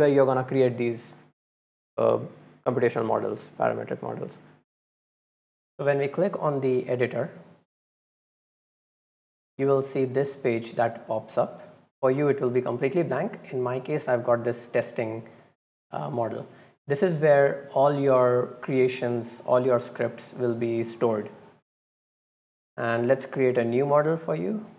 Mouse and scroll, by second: 3.4 click, 7.0 click.